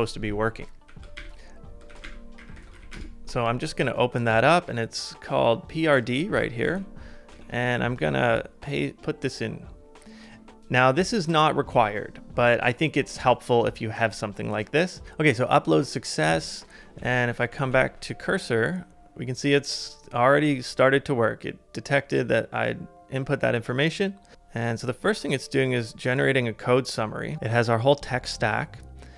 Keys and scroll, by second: 0.9 ctrl+a, 2.0 ctrl+a, 2.3-3.3 typing, 6.7 super+Tab, 7.3 super+Tab, 17.0 super+Tab, 17.5 super+Tab, 17.7 super+Tab.